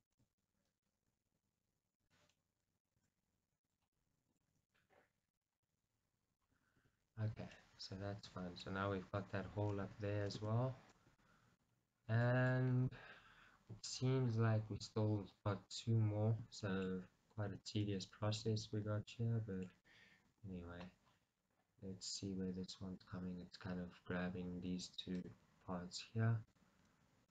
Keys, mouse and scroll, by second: 1.2 g, 2.4 middle click, 3.1 g, 3.8 click, 4.0 middle click, 4.6 g, 5.4 click, 5.7 middle click, 6.7 scroll, 6.9 Tab, 7.2-7.6 scroll down 1, 7.6 middle click, 8.9 scroll up 1, 9.9 Tab, 10.2 scroll down 1, 10.5 Tab, 11.2 KP_1, 11.8-12.3 scroll up 1, 12.5 middle click, 12.7 scroll up 2, 17.9-21.1 middle drag, 18.7-19.1 scroll down 2, 20.3 KP_1, 21.0 scroll up 2, 25.3-27.3 middle drag.